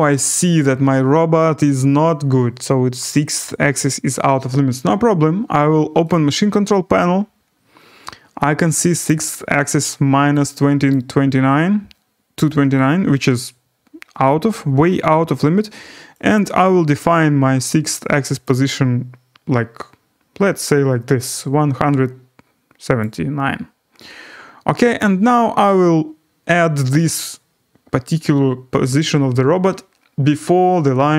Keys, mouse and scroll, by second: 0.2-3.6 drag, 6.1-9.0 drag, 10.9 click, 18.4 click, 23.0 click.